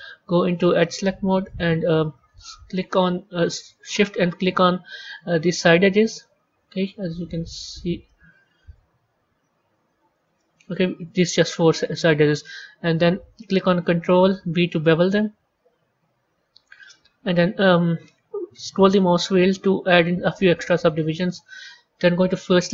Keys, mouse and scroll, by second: 0.4 click, 0.9-2.8 middle drag, 2.8 click, 6.0 shift+click, 7.5 shift+click, 7.9-9.8 middle drag, 9.8 shift+click, 10.2-13.3 middle drag, 14.3 ctrl+b, 22.4 click.